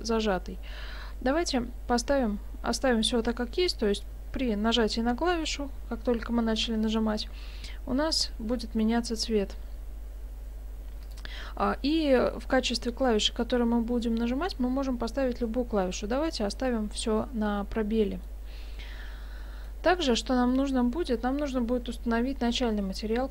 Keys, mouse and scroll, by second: 11.1 click, 17.5 middle click, 19.3-19.7 scroll down 2, 19.7 middle click.